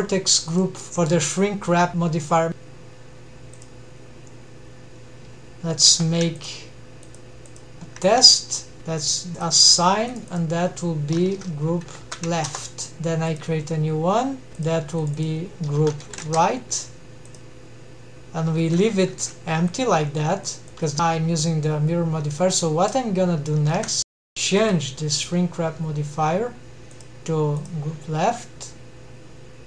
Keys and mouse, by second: 1.3 click, 5.9 3, 7.1 alt+shift+drag, 9.4-9.8 drag, 10.1-13.3 drag, 14.5 alt+a, 14.6-14.9 drag, 15.0-16.5 drag, 17.3 click, 18.6 alt+a, 19.1 alt+a, 19.7 click, 20.9 alt+a, 22.7 ctrl+Tab, 27.0 click.